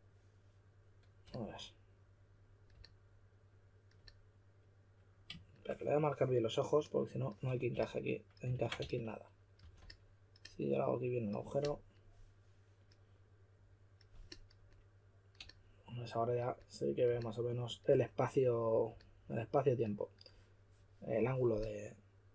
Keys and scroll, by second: 7.7 s, 8.5 super+z, 8.7-10.0 typing.